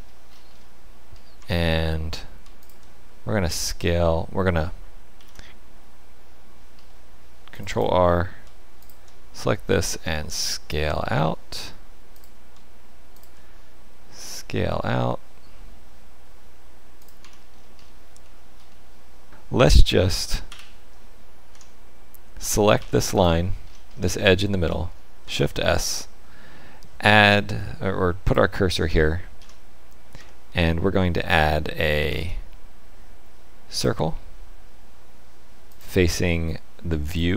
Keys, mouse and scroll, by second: 0.3-1.1 scroll up 5, 1.1 scroll up 3, 1.4 Tab, 2.6 alt+click, 5.1 ctrl+r, 8.8 alt+click, 10.0 s, 13.1 alt+click, 14.2 s, 17.2 Tab, 17.5-18.0 scroll down 7, 18.2 shift+middle click, 18.7 middle click, 19.3 ctrl+z, 19.3 Tab, 20.4 KP_1, 21.5 Tab, 22.7 2, 23.1 click, 23.6-24.2 scroll up 6, 24.2 shift+middle click, 25.2 shift+s, 29.4 Tab, 30.1 Tab, 32.0 shift+a, 35.7 click.